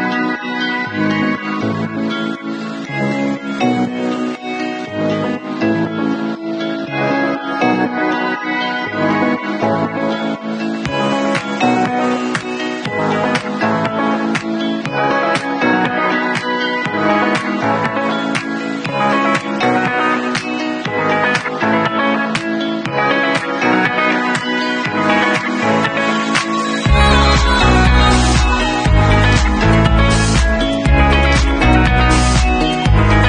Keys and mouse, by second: 7.9 Escape, 13.9 click, 13.9-16.3 middle drag, 15.8 Escape, 16.3-19.9 alt+drag, 19.9-22.4 middle drag, 22.4-33.2 alt+drag.